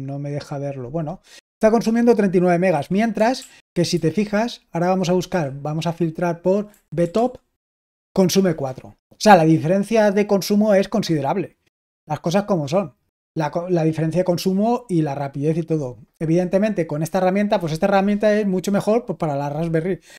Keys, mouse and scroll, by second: 2.6 Escape, 3.3 super+l, 3.8 super+h, 5.2 f, 6.4-7.6 typing.